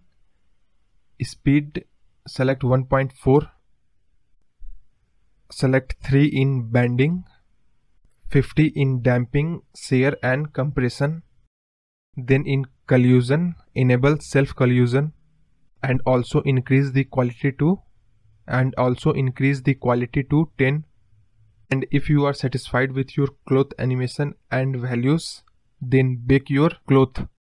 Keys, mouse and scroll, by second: 0.6-1.0 scroll down 1, 1.0-4.1 drag, 4.5-5.7 scroll down 2, 5.7-7.0 drag, 7.0-7.6 scroll down 5, 7.6-9.2 drag, 12.1-14.2 scroll down 26, 14.2-14.7 drag, 14.7-15.3 scroll down 5, 15.3-16.0 drag, 16.0-18.1 scroll down 9, 18.3 click, 20.4-21.9 drag, 23.3-24.8 drag, 26.7-27.3 scroll up 2, 27.3-27.5 drag.